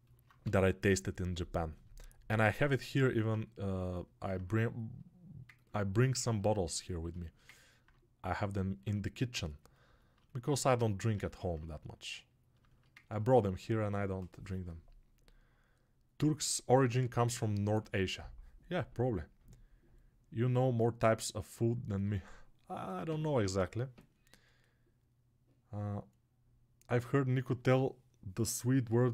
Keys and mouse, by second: 2.1-3.8 alt+shift+right drag, 3.8-29.1 alt+drag.